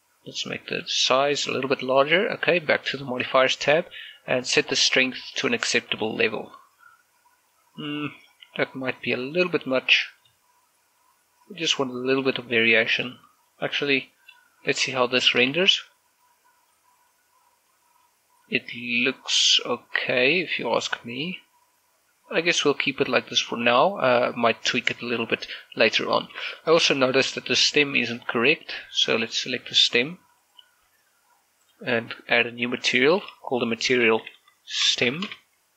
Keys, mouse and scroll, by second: 0.6 click, 7.8 middle click, 8.8 scroll up 1, 11.0 click, 11.8-13.8 middle drag, 13.8 click, 14.3 middle click, 15.4 shift+scroll down 1, 16.0 shift+middle click, 16.3 shift+z, 17.3 scroll down 1, 17.5 middle click, 18.5-26.9 middle drag, 27.4 scroll up 1, 27.7 shift+middle click, 30.0 right click, 30.5 g, 31.1 right click, 32.4 click, 34.7-35.7 typing.